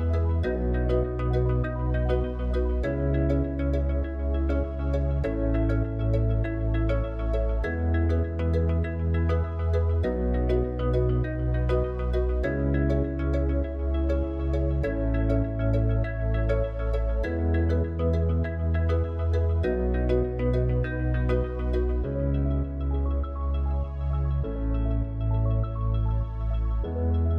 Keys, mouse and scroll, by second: 1.6 click, 2.6 Tab, 5.8 KP_7, 7.4 click, 8.2 click, 11.2 u, 16.5 Tab, 23.4-26.5 drag.